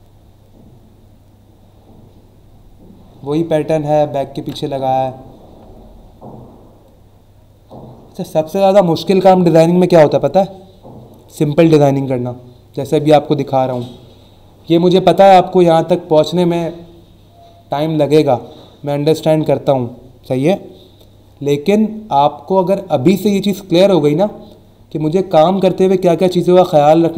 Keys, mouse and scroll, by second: 0.6 scroll down 1, 1.5-2.1 scroll down 2, 5.8-7.4 scroll down 4.